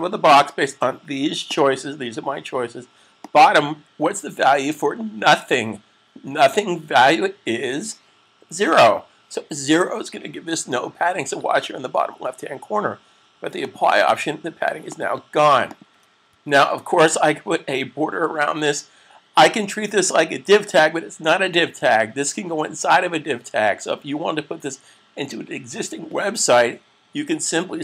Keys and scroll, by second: 8.3 0, 16.1 super+s.